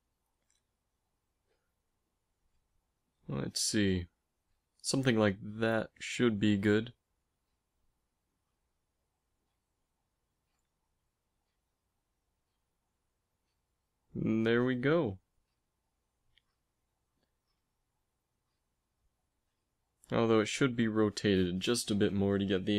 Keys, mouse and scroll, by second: 1.1 g, 2.4 r, 3.8 g, 7.6 Tab, 8.1-11.0 typing, 9.8-11.8 right drag, 17.2 z, 18.5 z, 19.8 Tab, 20.5 r.